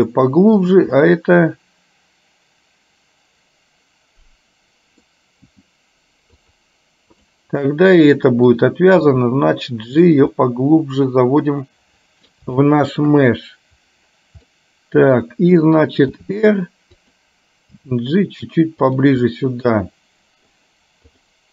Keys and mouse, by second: 0.7 click, 1.3-5.1 middle drag, 5.6 g, 7.2 click, 7.8 middle click, 9.1 g, 10.5-12.3 middle drag, 12.7 shift+middle click, 14.6 middle click, 16.2 r, 17.8 g, 19.5-20.6 middle drag, 21.2 click.